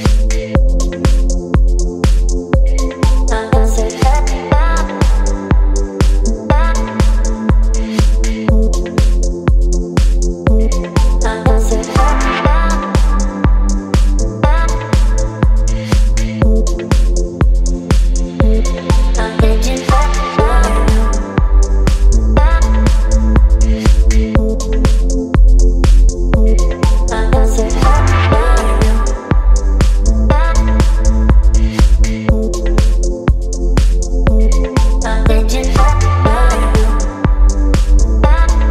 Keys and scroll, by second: 4.0 KP_4, 8.0 KP_5, 8.3 KP_0, 20.6 KP_3, 23.9 KP_3, 24.1 KP_0.